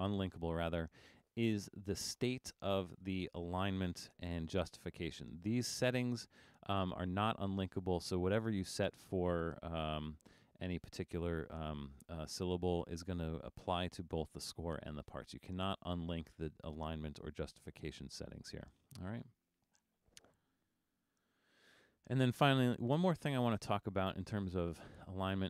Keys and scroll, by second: 21.3 super+-, 21.8 super+-, 22.3 super+-.